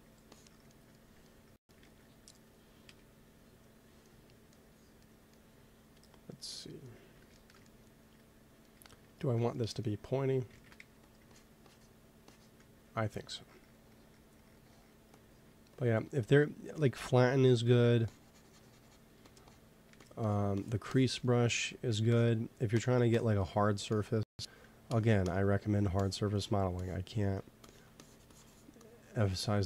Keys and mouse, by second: 1.7 ctrl+s, 2.8 KP_1, 6.8-8.8 middle drag, 10.4 shift+c, 10.9 f, 11.2-14.0 drag, 12.8 t, 16.0-17.1 drag, 16.2 t, 18.0-19.4 drag, 19.1 f, 19.6 click, 19.8 f, 20.7-23.2 drag, 21.7 ctrl+z, 25.9 click, 26.3 click, 26.5-29.6 drag.